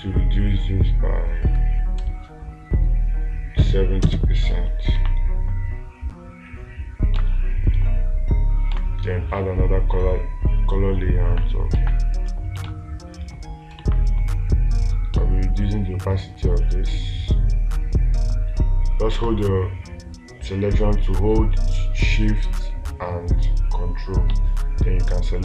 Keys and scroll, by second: 7.6 space, 12.2 space, 13.1 space.